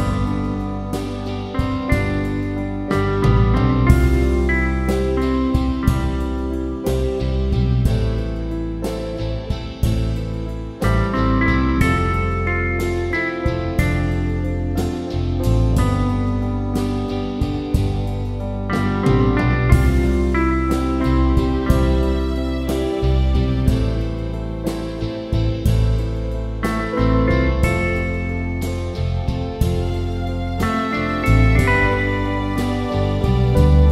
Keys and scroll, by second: 3.2 Up, 3.4 Up, 3.6 Up, 3.8 Up, 4.0 Up, 4.3 Up, 4.7 Up, 9.6 Down, 9.8 Down, 10.0 Down, 10.2 Down, 10.8 Down, 11.6 Down, 12.2 Down.